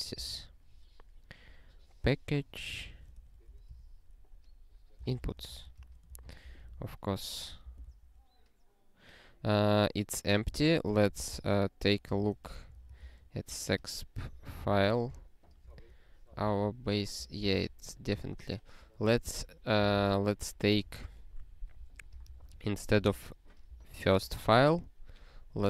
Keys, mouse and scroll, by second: 0.0-0.7 typing, 3.1 ctrl+BackSpace, 3.7 -, 4.8-6.1 typing, 6.3 ctrl+n, 6.5 ctrl+e, 7.6 ctrl+b, 7.9 ctrl+e, 10.5 super+b, 12.1 ctrl+g, 15.7 alt+<, 16.4 ctrl+n, 17.1 ctrl+n, 17.5 ctrl+n, 19.7 super+b, 20.7 ctrl+p, 20.9 ctrl+p, 21.8 ctrl+p, 22.1 ctrl+n, 22.3 ctrl+n, 22.4 ctrl+n, 23.0 alt+b, 23.7 alt+b, 24.2 alt+f.